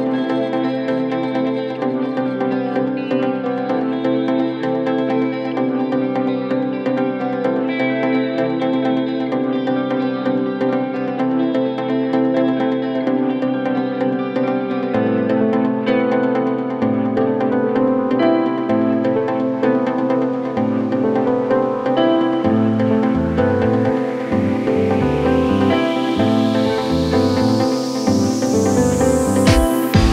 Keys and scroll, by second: 2.2 c, 13.2 Delete, 25.2 c, 28.1 c, 28.4 shift+F2, 28.8 Escape.